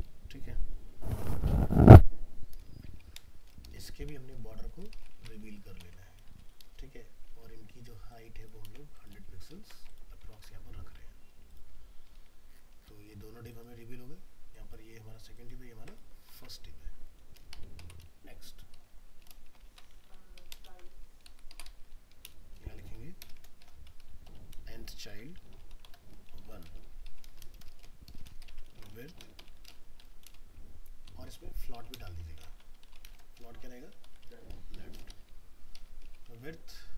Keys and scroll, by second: 5.2 ctrl+c, 5.8 ctrl+v, 8.6 ctrl+c, 9.1 ctrl+v, 9.5 ctrl+s, 16.4 alt+Tab, 19.7 ctrl+c, 20.6 ctrl+v.